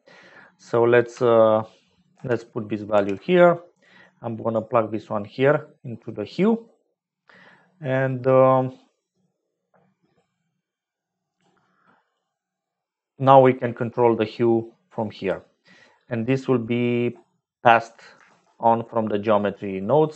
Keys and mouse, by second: 2.1 ctrl+c, 2.9 ctrl+v, 3.8 click, 11.4 click, 13.2-15.2 drag, 16.5 click, 16.6 middle click, 16.7 click, 16.8 middle click, 17.0 click, 17.9 shift+click, 18.2 shift+a.